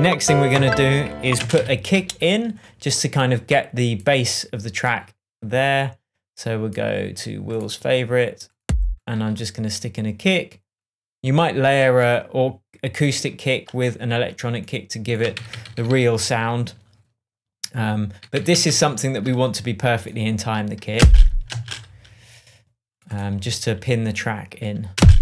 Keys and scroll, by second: 1.3 space, 1.5 k, 15.3 super+d, 18.3 super+d, 20.9 space, 24.9 space.